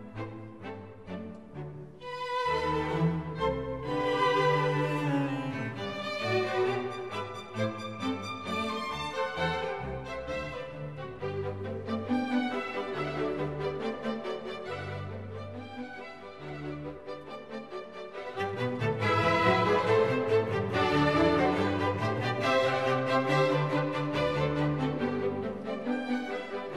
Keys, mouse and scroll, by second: 9.8 double click, 10.0 double click, 10.1 double click, 10.2 double click, 10.9 double click, 16.3 double click, 22.9 ctrl+-, 23.6 ctrl+-.